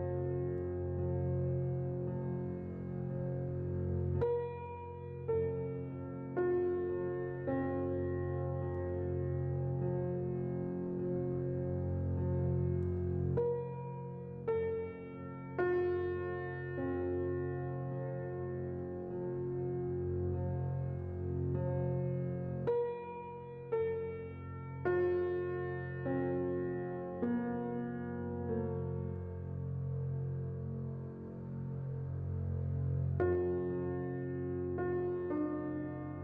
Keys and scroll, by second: 1.5 typing, 1.8 Return, 3.0 typing, 10.4 typing, 10.6 Return, 23.0 a, 33.0 n.